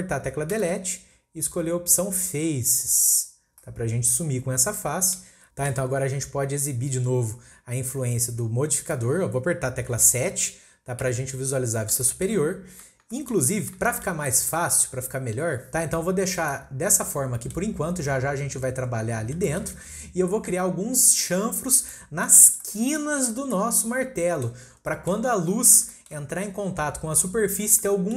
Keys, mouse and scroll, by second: 0.6 Delete, 3.6-8.3 middle drag, 8.8 click, 11.0 KP_7, 11.7-12.0 scroll down 2, 12.0-12.5 shift+middle drag, 12.5-13.1 scroll up 1, 13.1-15.6 shift+middle drag, 15.6-17.4 scroll down 1, 17.4 middle click, 17.7-19.2 scroll up 2, 19.5-21.7 shift+middle drag, 21.7 scroll down 1, 21.9-23.3 middle drag, 23.3 scroll down 1, 23.5-24.7 middle drag, 24.7 scroll up 1, 24.9-28.1 middle drag.